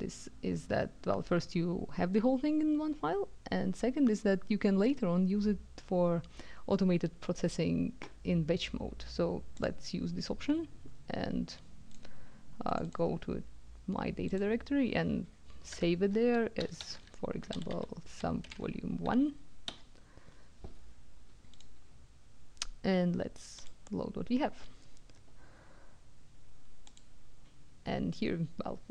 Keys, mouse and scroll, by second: 9.6 click, 11.8 click, 12.6 click, 14.2 click, 15.7-19.6 typing, 21.6 click, 23.6 click, 26.9 click.